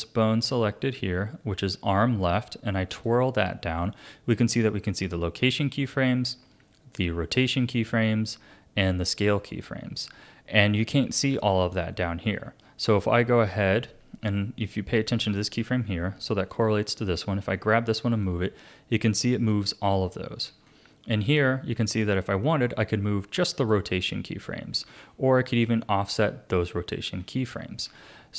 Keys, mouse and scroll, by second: 0.4 click, 2.9 click, 16.5 click, 18.2-20.5 drag, 20.5 ctrl+z, 21.3-24.9 drag, 24.9 ctrl+z, 25.5 click, 26.2-27.9 drag, 27.9 ctrl+z.